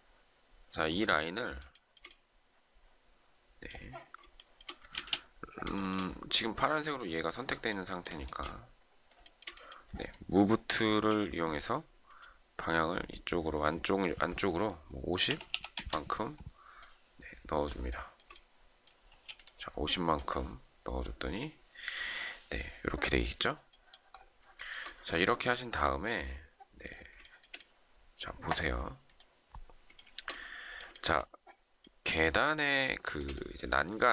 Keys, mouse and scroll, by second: 1.7 shift+middle click, 4.3 shift+middle click, 4.9 space, 5.7 shift+middle click, 8.2 shift+middle click, 11.0 m, 14.8-15.8 typing, 17.8 shift+middle click, 19.0 space, 24.5 shift+middle click, 27.2 shift+middle click, 29.9 shift+middle click, 30.9 shift+middle click, 32.8 shift+middle click.